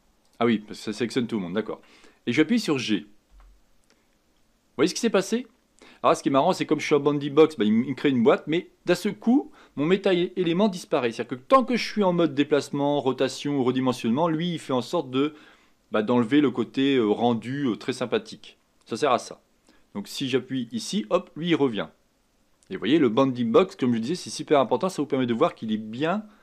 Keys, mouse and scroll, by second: 0.2 click, 3.3 g.